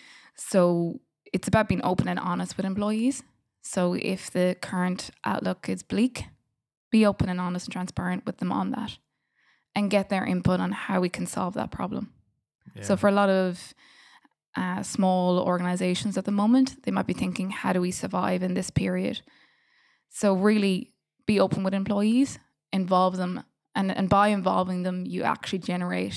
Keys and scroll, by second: 2.9 F7, 4.4 g, 5.3 d, 6.6 g, 7.4 d, 9.1 g, 13.4 BackSpace, 15.5 f, 16.3 h, 17.0 g, 18.0 d.